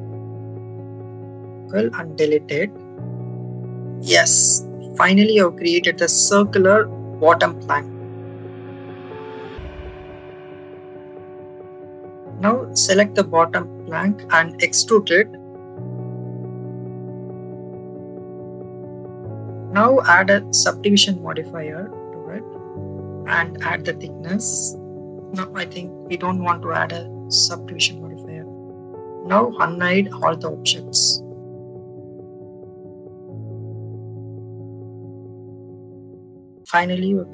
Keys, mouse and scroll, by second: 0.1 shift+click, 0.8 shift+click, 1.1 shift+click, 1.9 Delete, 4.0 click, 6.7 click, 9.2 click, 11.4 shift+middle click, 13.0 a, 13.9 e, 17.0 z, 17.7 click, 18.8-21.0 drag, 23.6 click, 25.5 click, 26.8 click, 27.8 click, 28.6 Tab, 30.4 click, 31.0 click, 31.3 click, 31.6 click, 31.9 click, 32.3 click, 33.8 click, 34.6 click, 35.6 click, 36.7-37.3 drag.